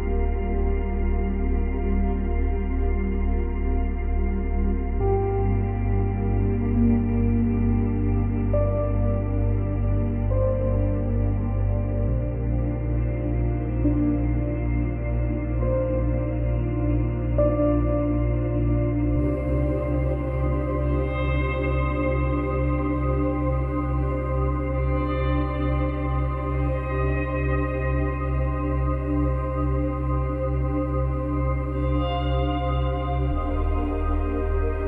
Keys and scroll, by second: 6.6 space, 8.1 space, 10.0 space, 14.0 space, 21.3 space, 22.0 space.